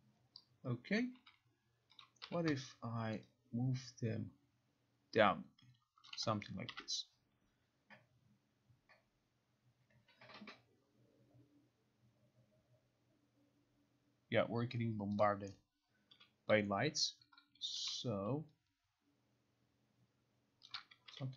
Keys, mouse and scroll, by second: 2.1 click, 2.3 e, 6.2 click, 6.8 ctrl+r, 15.3 click, 16.3 r, 18.0 e, 20.8 click, 21.2 r.